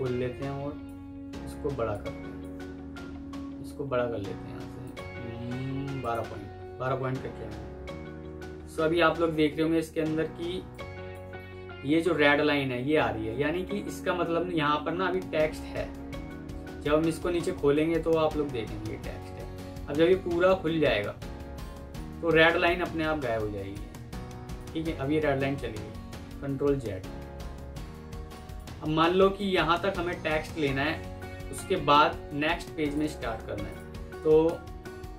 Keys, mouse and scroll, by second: 10.1 F2, 13.3-13.8 alt+scroll down 1, 22.7 F3, 26.2 ctrl+z, 26.8 ctrl+z, 27.8 F2, 28.8-29.2 alt+scroll up 1.